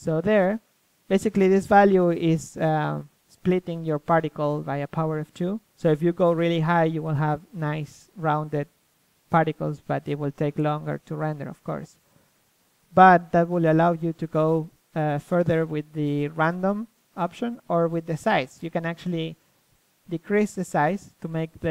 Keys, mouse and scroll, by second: 1.2-2.9 drag, 4.2-5.7 drag, 5.7-7.6 middle drag, 6.5-7.6 scroll up 1, 7.6 click, 8.2 middle click, 11.6-14.2 middle drag, 14.2-15.6 drag, 16.9 middle click, 19.0-21.7 middle drag.